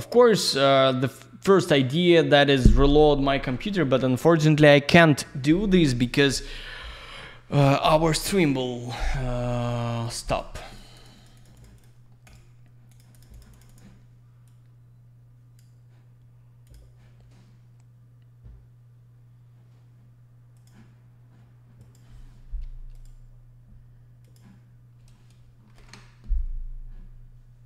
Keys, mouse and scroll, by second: 9.6 click, 9.7 click, 9.9 click, 10.0 click, 10.3 click, 10.4 double click, 10.5 click, 10.7 click, 10.7 click, 11.0 click, 11.2 click, 11.2 double click, 11.4 click, 11.4 click, 11.6 click, 11.6 double click, 11.8 click, 11.8 click, 12.2 click, 12.3 click, 12.9 click, 13.0 click, 13.1 click, 13.2 double click, 13.3 click, 13.4 click, 13.5 click, 13.6 double click, 13.7 click, 13.8 click, 14.5 click, 16.7 click, 16.7 click, 20.9 click, 21.8 click, 21.9 click, 22.9 click, 23.0 click, 24.6 click, 25.7 ctrl+shift+Escape.